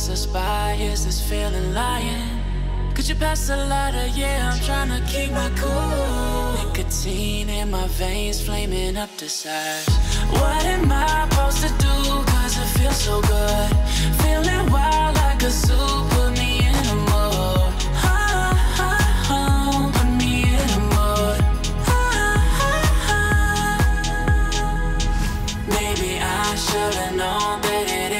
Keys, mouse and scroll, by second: 1.4 alt+scroll down 1, 2.1 alt+scroll up 1, 2.5-3.6 drag, 4.4 alt+scroll down 1, 5.2 alt+scroll up 1, 5.7-6.4 drag, 8.6 click, 13.2 click, 21.8 click, 27.1 click.